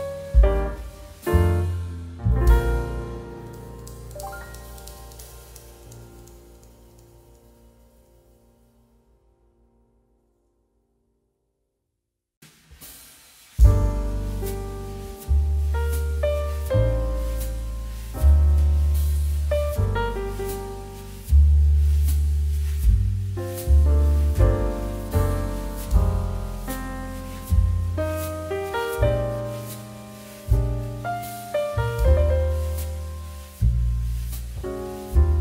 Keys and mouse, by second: 1.8 1, 2.1 Return, 4.1 click, 14.0 middle click, 14.5 shift+middle click, 14.7 middle click, 15.0 click, 15.2 shift+middle click, 15.7 shift+middle click, 16.3 shift+middle click, 17.1 click, 17.9 shift+middle click, 18.1 click, 19.0 shift+click, 20.2 ctrl+p, 20.9 click, 21.6 r, 22.9 Escape, 24.9 click, 34.4 click.